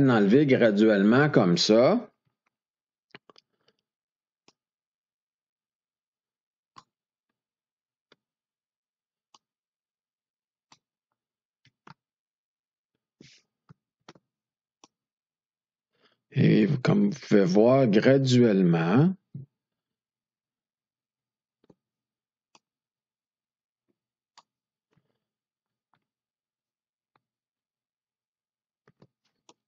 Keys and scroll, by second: 2.2 F2, 7.8 F2, 11.6 F2, 13.9 ctrl+d, 18.8 F2, 21.5 ctrl+d, 25.6 F2, 28.8 ctrl+d.